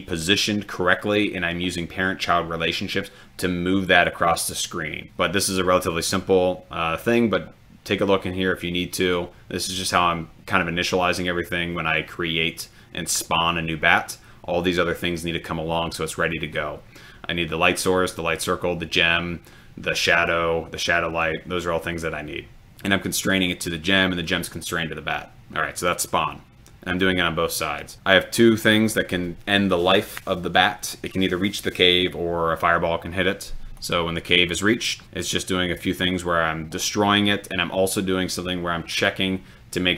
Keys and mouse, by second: 33.9 click.